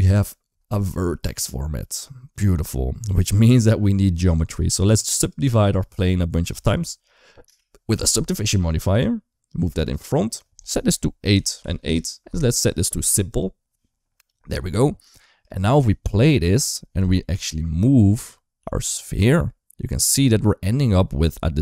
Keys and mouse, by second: 5.0 click, 5.7-7.2 drag, 8.8-9.8 drag, 10.5-11.7 drag, 15.9 space, 16.5 click, 17.2 KP_7, 18.5 g.